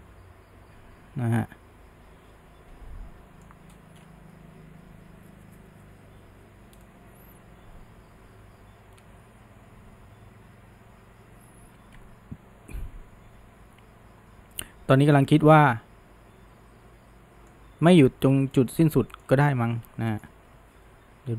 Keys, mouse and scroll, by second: 4.0-6.8 scroll up 1, 6.8 scroll up 1, 6.9-9.9 middle drag, 18.3 scroll up 2, 18.6-20.2 middle drag, 20.8 ctrl+z, 20.9 ctrl+z, 21.2 ctrl+z.